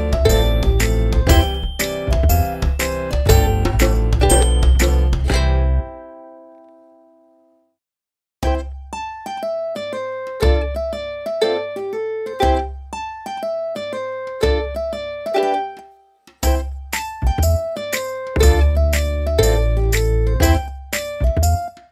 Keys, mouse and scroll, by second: 1.9 ctrl+click, 4.3 ctrl+click, 5.7 ctrl+click, 7.7 ctrl+j, 8.7 click, 12.2-14.9 typing, 16.5-18.0 typing, 18.1 ctrl+Return, 19.8 click.